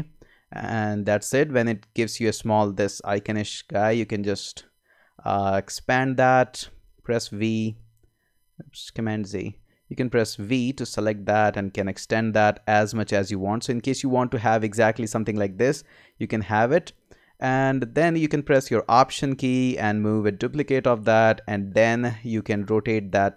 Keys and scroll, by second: 6.7 v, 8.9 super+z, 10.2 v.